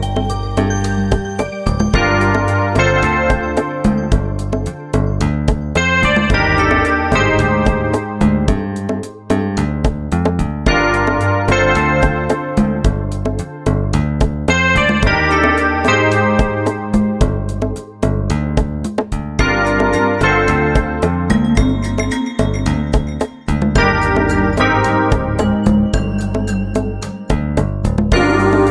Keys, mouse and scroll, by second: 0.2 middle click, 0.3 right click, 1.2 KP_1, 1.4 click, 1.9 middle click, 2.2 right click, 2.5 KP_1, 2.7 click, 2.9 middle click, 3.1 right click, 3.6 KP_1, 3.8 click, 4.4 ctrl+Tab, 4.6 right click, 5.0 g, 5.5 r, 5.9 click, 6.3 middle click, 6.6 ctrl+Tab, 6.7 middle click, 6.9 right click, 7.6 KP_1, 8.2-9.4 middle drag, 9.4 ctrl+Tab, 9.7 right click, 10.3 right click, 10.5 KP_1, 10.9 click, 11.5 ctrl+Tab, 12.1 click, 12.7 KP_1, 12.9 middle click, 13.0 click, 13.4 middle click, 13.4 right click, 13.7 KP_1, 14.0 click, 15.0 middle click, 15.1 right click, 15.5 middle click, 15.8 KP_1, 16.0 click, 16.6 click, 17.2 middle click, 17.5 right click, 17.8 KP_1, 18.1 click, 18.6 middle click, 18.8 click, 18.8 right click, 19.1 KP_1, 19.2 click, 19.6 right click, 19.7 middle click, 19.9 ctrl+Tab, 20.3 right click, 20.7 KP_1, 20.9 click, 21.5 middle click, 21.7 right click, 22.0 KP_1, 22.3 click, 22.6 middle click, 22.9 ctrl+Tab, 23.1 right click, 23.7 KP_1, 24.0 click, 24.6 middle click, 24.9 right click, 25.3 KP_1, 25.5 click, 25.9 ctrl+Tab, 26.4 right click, 26.8 KP_1, 27.0 click, 27.4 middle click, 27.7 ctrl+Tab, 28.0 right click, 28.5 KP_1.